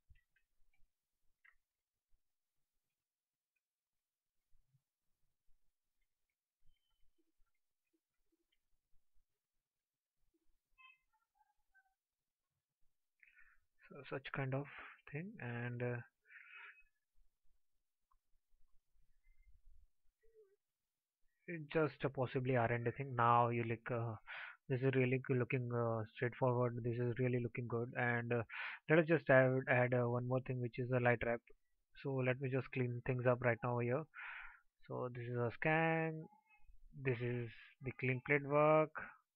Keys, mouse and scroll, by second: 0.4 ctrl+z.